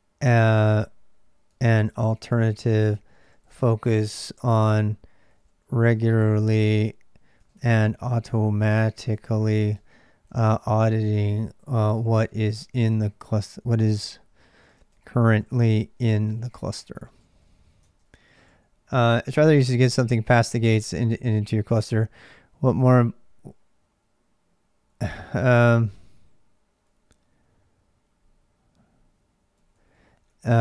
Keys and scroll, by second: 0.0-30.6 typing, 19.8 ctrl+[.